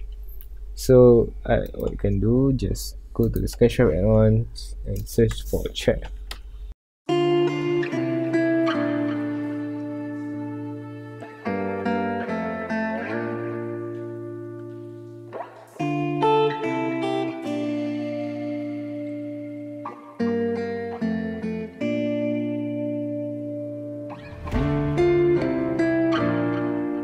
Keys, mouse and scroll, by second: 8.1 BackSpace, 8.6 Return, 9.6-17.6 drag, 24.9 scroll down 1, 25.3 middle drag, 25.5 scroll up 1, 25.6-27.0 middle drag.